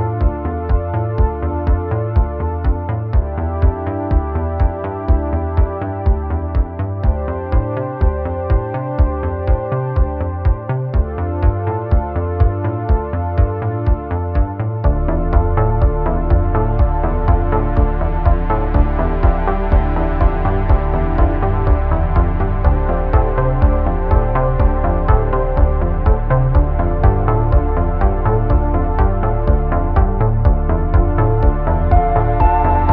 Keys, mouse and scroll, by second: 2.9 click, 5.2-7.2 drag, 7.7 click, 7.9 Tab, 8.2 click, 8.5-10.6 typing, 8.7 click, 9.2 middle click, 9.2 click, 9.4 middle click, 10.1 alt+click, 10.4 middle click, 11.5 middle click, 11.8 ctrl+b, 13.2 click, 13.9-16.0 drag, 17.3 click, 17.6 middle click, 17.8 alt+1, 18.1 alt+right click, 20.2-23.4 drag, 24.2 middle click, 26.5 shift+click, 27.0 middle click, 27.5 2, 28.4 x, 30.3 middle click, 31.1-32.7 middle drag, 32.7 click, 32.7 right click.